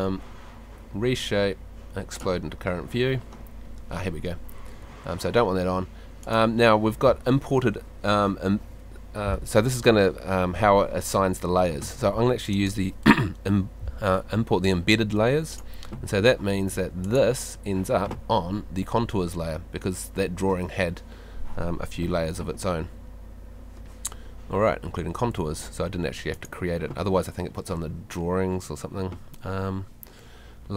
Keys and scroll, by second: 16.7 Escape.